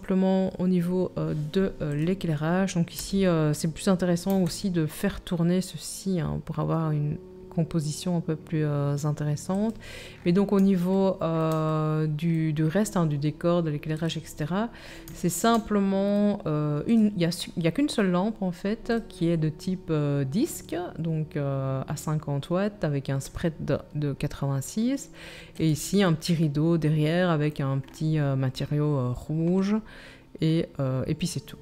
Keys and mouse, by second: 1.9 click, 2.0-13.9 middle drag, 3.1 r, 13.9-17.0 drag, 17.0-18.9 middle drag, 18.9 click, 19.1-25.5 middle drag, 25.5 click, 25.7-31.6 middle drag.